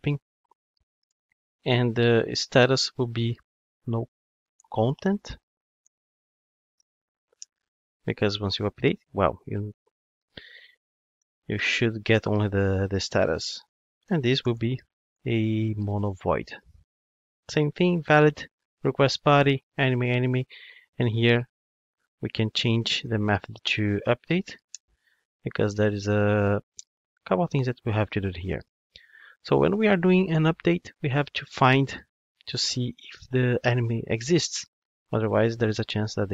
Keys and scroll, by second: 3.8 Return, 9.6 Return, 16.2 Return, 24.7 alt+Return.